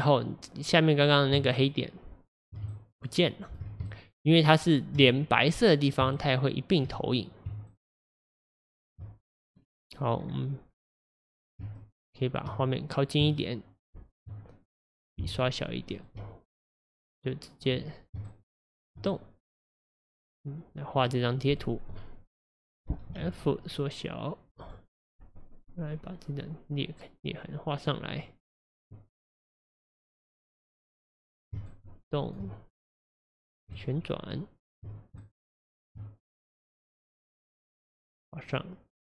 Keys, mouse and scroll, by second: 1.5-9.5 shift+right drag, 9.5-10.2 scroll up 2, 10.2-10.8 scroll down 2, 10.8-11.8 scroll up 3, 11.8-13.4 shift+middle drag, 13.4-15.3 shift+right drag, 15.3-16.1 f, 18.2-22.1 shift+right drag, 23.5 f, 25.6-31.7 drag, 31.7-37.8 shift+right drag, 37.8-39.1 drag.